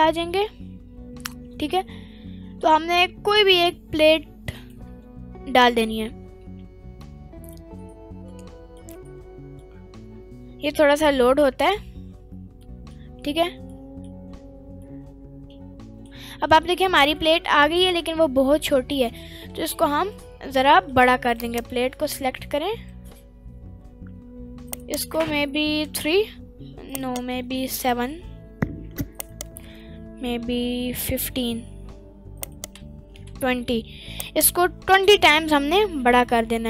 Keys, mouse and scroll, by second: 4.6 click, 7.0-7.7 middle drag, 8.3 middle click, 9.0 scroll up 1, 9.7-10.7 middle drag, 9.7-10.1 scroll up 2, 12.6 middle click, 13.1-13.4 scroll up 1, 13.8 middle click, 13.8-14.6 scroll up 3, 14.8 scroll up 3, 14.9-16.1 middle drag, 17.0 scroll down 1, 17.2-17.6 middle drag, 18.0-18.5 scroll down 4, 18.6-18.9 middle drag, 19.1-19.5 scroll down 1, 19.5 s, 20.2 right click, 20.7 middle click, 21.4 click, 22.0 middle click, 22.4-23.0 scroll down 2, 22.8 s, 24.7 right click, 25.2 s, 25.8 3, 26.9 right click, 27.2 s, 27.8 7, 29.2 right click, 29.7 s, 30.7 1, 31.1 5, 32.4 right click, 32.8-35.9 typing, 34.2 right click.